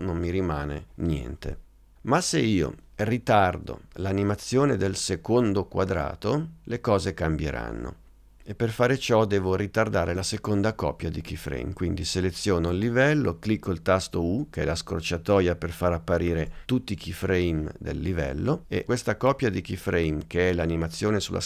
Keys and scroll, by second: 14.6 u.